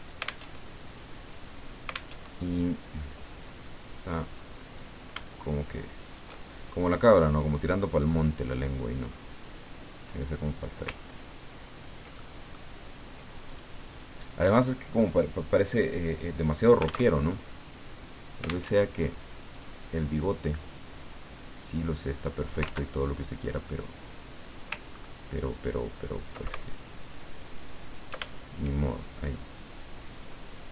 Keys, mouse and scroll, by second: 0.6 alt+Tab, 2.1 alt+Tab, 3.9 click, 6.0 shift+click, 6.6-10.8 shift+drag, 11.2-11.8 ctrl+scroll down 2, 12.2 ctrl+middle click, 13.4 click, 17.1 alt+Tab, 18.7 alt+Tab, 19.5 click, 21.3-22.7 drag, 22.6 ctrl+z, 24.9 ctrl+scroll up 2, 26.7 ctrl+alt+click, 27.4 alt+click, 28.2 alt+shift+click, 30.1-30.7 drag.